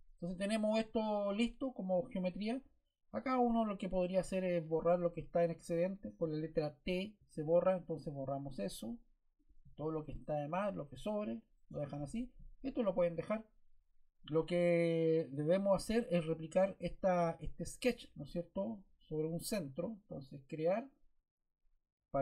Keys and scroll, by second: 7.2 t, 15.4 Escape.